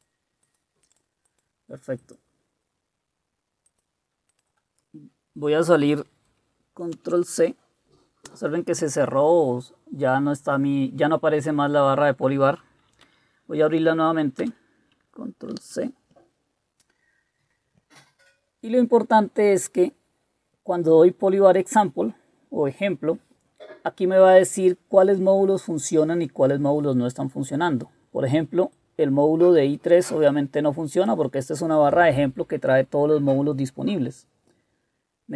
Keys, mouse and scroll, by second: 7.0 ctrl+c, 13.0 Up, 14.4 Return, 15.5 ctrl+c.